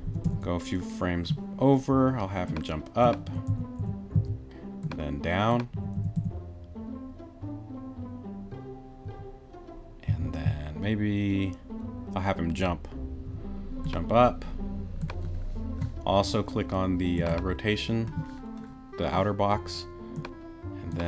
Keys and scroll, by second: 0.1 Right, 3.3 Right, 4.1 Left, 5.7 Right, 9.0 Right, 10.1 Left, 13.3 Right.